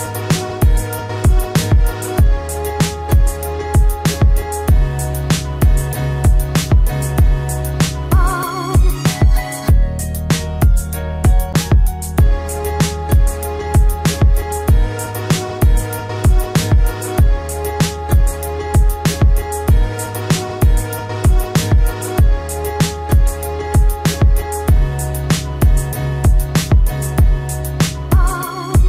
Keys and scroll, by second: 1.6 ctrl+alt+z, 20.0 ctrl+alt+z, 24.7 ctrl+alt+z.